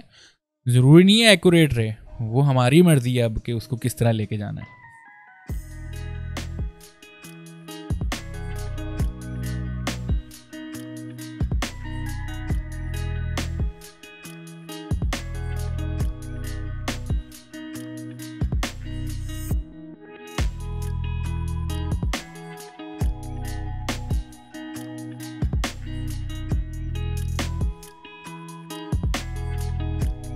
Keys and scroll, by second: 4.9 p, 6.3-7.9 typing, 8.2 ctrl+space, 8.7 ctrl+z, 8.8 ctrl+space, 9.6 ctrl+space, 10.1 a, 10.5 v, 10.6 a, 11.0 v, 11.6 ctrl+space, 12.1 ctrl+space, 12.5 p, 13.6 ctrl+z, 13.9 ctrl+space, 15.1 ctrl+space, 16.8 ctrl+space, 17.4 ctrl+space, 17.4 ctrl+z, 18.2 ctrl+space, 21.4 ctrl+space, 22.0 ctrl+space, 22.1 ctrl+z, 22.7 ctrl+space, 23.4 ctrl+z, 23.9 space, 25.9 space, 26.4 space, 27.8-29.7 typing, 28.6 ctrl+space.